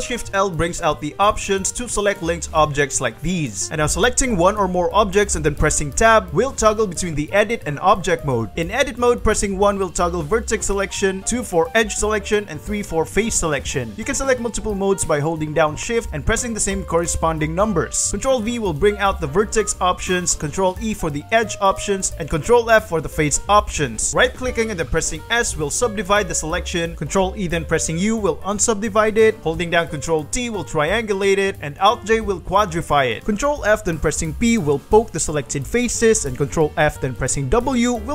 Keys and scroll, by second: 1.2 g, 2.2 Escape, 2.6 ctrl+shift+l, 3.3 g, 4.9 Tab, 6.0 shift+Tab, 7.0 shift+Tab, 7.9 shift+Tab, 8.5 shift+1, 12.1 2, 12.8 3, 13.8 shift+2, 17.6 shift+2, 18.0 ctrl+v, 20.2 ctrl+e, 22.2 ctrl+f, 23.9 a, 24.9 s, 25.5 ctrl+s, 26.7 Return, 27.5 u, 30.1 a, 30.7 ctrl+t, 32.4 alt+j, 33.4 ctrl+f, 34.1 p, 34.5 ctrl+f, 34.9 ctrl+p, 35.5 ctrl+f, 35.7 ctrl+p, 36.4 ctrl+f, 37.0 ctrl+w.